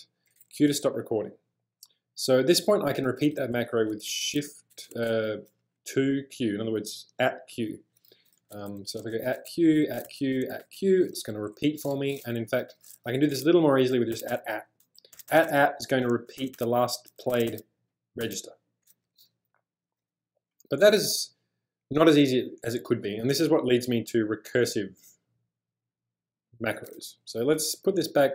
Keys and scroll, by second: 0.5 q, 4.2 shift+2, 4.9 q, 8.9-10.6 typing, 12.0 j, 13.1-18.2 typing, 27.4-28.3 typing.